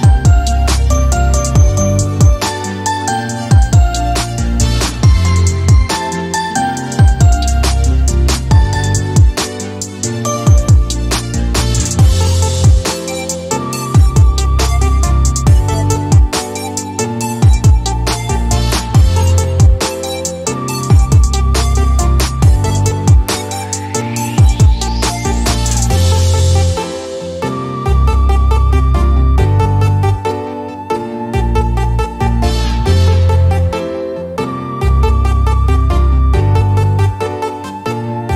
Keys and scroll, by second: 3.6-4.4 typing, 9.8 7, 10.0 Return, 15.4 9, 15.7 Return, 19.7-20.1 typing, 25.3 Escape, 27.1 x, 30.8-32.5 typing, 32.9 Down, 33.2 Down, 33.4 Down, 34.0 Return, 36.9-37.7 typing.